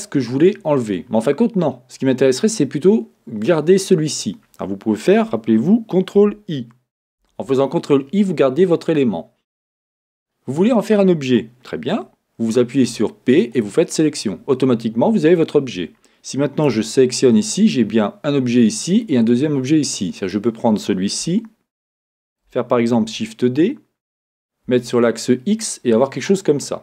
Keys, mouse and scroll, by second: 7.2 ctrl+i, 7.2-12.9 middle drag, 10.1-11.3 scroll down 1, 12.9 p, 16.7 Tab, 17.3 click, 18.9 click, 20.2 click, 21.2 shift+middle click, 22.0-26.1 middle drag, 26.3 click.